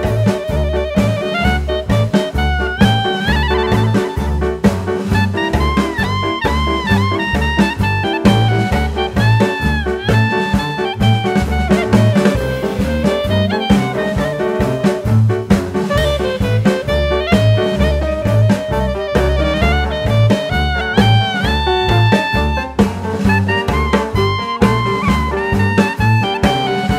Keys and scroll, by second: 6.1 KP_1, 7.5 e, 14.7 Tab, 15.2 ctrl+r, 18.4 ctrl+r, 23.4 ctrl+r.